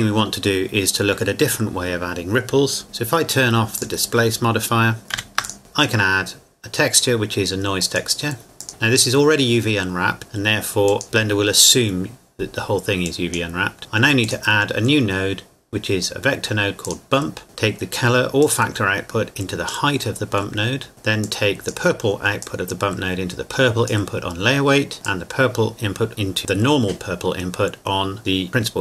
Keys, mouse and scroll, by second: 3.8 click, 5.1 ctrl+s, 5.5-7.7 drag, 7.8-10.2 drag, 10.9-12.6 drag, 16.8 click, 17.4 scroll up 1, 18.4 click, 20.6 middle click, 20.9 click, 28.5-28.8 scroll down 1.